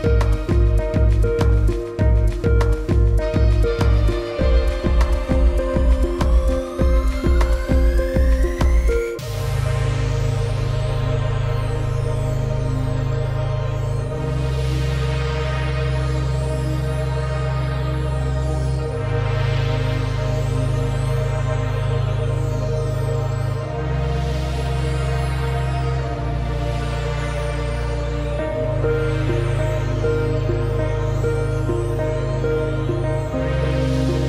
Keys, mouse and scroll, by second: 0.8 click, 7.5 click, 8.7 click, 11.4 alt+scroll down 1, 11.7 click, 11.9 space, 12.4 scroll down 1, 12.7 click, 16.2 alt+scroll up 2, 16.5 space, 16.7 click, 16.8 space, 19.6 click, 25.9 space, 26.3 click, 26.7 scroll down 1, 26.8 click, 27.1 space, 27.7 alt+scroll up 2, 28.5 click, 29.1-29.9 alt+scroll down 3, 29.9 space, 30.1 click, 30.3 alt+scroll down 2, 31.4 click, 32.3 space, 32.5 click, 32.6 space, 32.8 alt+scroll up 2, 33.6 alt+click, 34.2 ctrl+z.